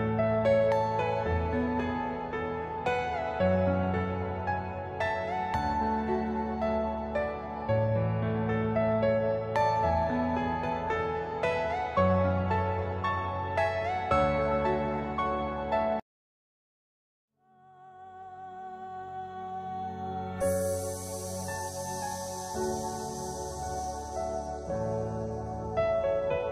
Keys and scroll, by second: 6.3 F2, 11.7 F3, 13.1 F2, 17.5 F3, 18.3 ctrl+z, 22.1 Escape, 22.2 F2.